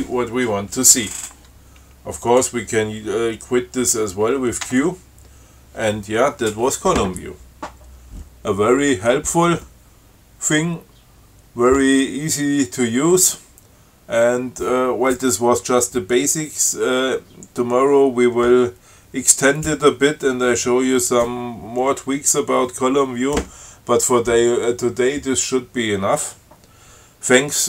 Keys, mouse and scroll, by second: 2.5 click, 4.9 q.